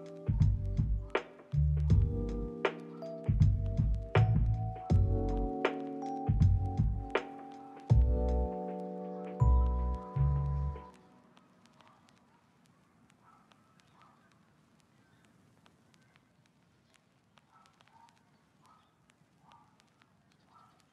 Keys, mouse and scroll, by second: 0.1 middle click, 2.1 ctrl+click, 2.8 ctrl+click, 3.0 scroll up 1, 3.4 shift+click, 4.3 1, 4.8 a, 6.0 ctrl+click, 6.2 ctrl+z, 7.0 double click, 7.1 g, 8.0 ctrl+click, 8.3 shift+middle click, 9.0 g, 9.2 ctrl+click, 9.4 middle click.